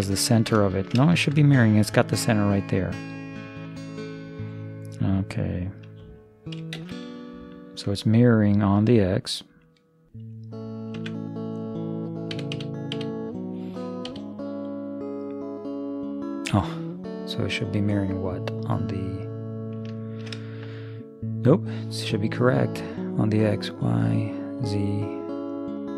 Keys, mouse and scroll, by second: 0.4-4.6 middle drag, 6.8 shift+space, 11.1 Tab, 12.4 a, 12.6 a, 13.0 a, 14.1 g, 20.1 middle click, 23.6-25.9 drag.